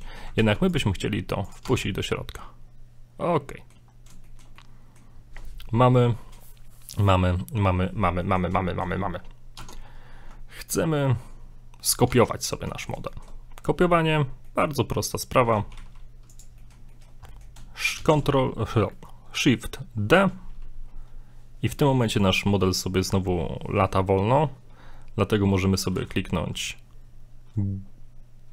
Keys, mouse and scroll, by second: 0.4 middle click, 0.4 alt+e, 1.6 Tab, 1.8 scroll down 3, 2.0 middle click, 4.2 shift+middle click, 4.6 middle click, 8.2 middle click, 8.7 shift+middle click, 8.8 shift+middle click, 9.6 Tab, 9.9 scroll up 2, 11.1-11.8 scroll down 2, 12.1 Tab, 12.7 middle click, 13.1 shift+middle click, 14.2 scroll down 2, 14.5 middle click, 14.8 scroll up 2, 15.4 middle click, 15.7 g, 16.6 middle click, 16.9 shift+middle click, 17.3 middle click, 18.0 shift+d.